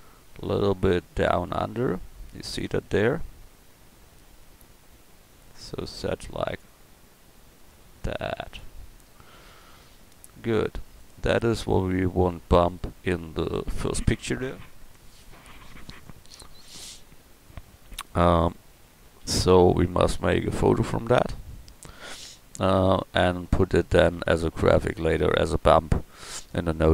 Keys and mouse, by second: 2.9-19.2 drag, 19.2 a.